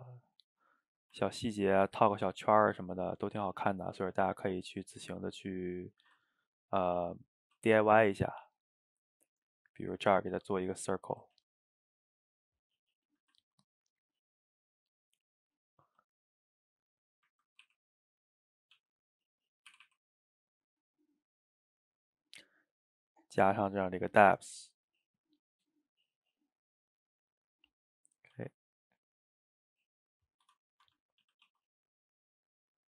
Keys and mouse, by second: 0.2-6.0 middle drag, 6.0 shift+right click, 6.3-7.3 ctrl+middle drag, 7.3 shift+right click, 7.5 shift+a, 10.4 s, 11.4 ctrl+z, 11.8 ctrl+z, 13.2 shift+a, 15.9 s, 16.9 middle click, 17.6 r, 18.4-18.8 middle drag, 18.8 g, 19.4 middle click, 19.8 r, 21.7 click, 22.7-24.0 middle drag, 24.0-27.8 shift+drag, 27.8-28.4 middle drag, 28.4 s, 30.9 Tab, 31.3 a, 31.5 s.